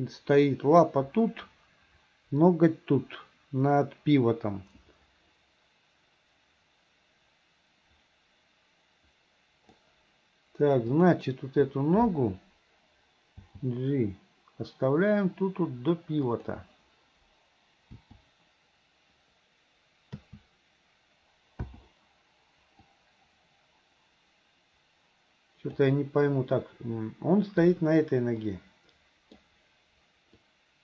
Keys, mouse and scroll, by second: 10.9 click, 13.4 g, 18.0 i, 20.2 a, 21.7 i, 23.0-25.9 drag, 26.6-27.7 middle drag, 28.6-29.4 middle drag, 30.5-30.8 drag.